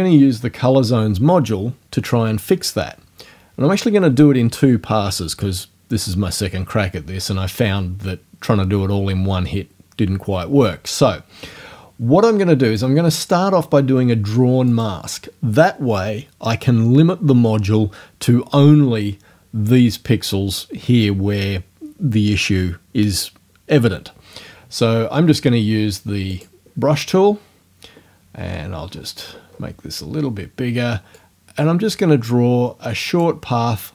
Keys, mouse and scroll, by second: 12.7 click, 14.7 click, 26.3 click, 28.4-28.8 scroll up 1, 29.2 scroll down 1, 31.2-33.4 drag.